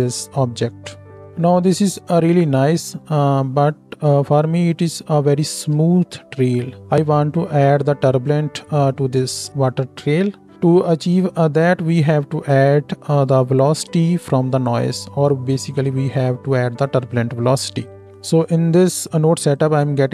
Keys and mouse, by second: 1.9 space, 5.9 space, 7.0 space, 8.9-19.5 drag, 8.9-18.1 middle drag, 8.9-18.1 right drag, 10.5 space.